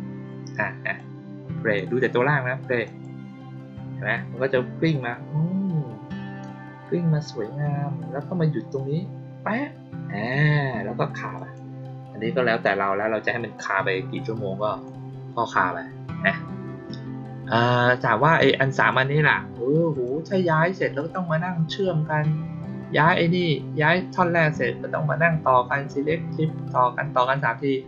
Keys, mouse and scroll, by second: 0.9-1.7 drag, 2.8 click, 11.3 click, 12.4 click, 13.5-14.8 drag, 18.7 click, 19.8 click, 20.9 click, 22.9 click.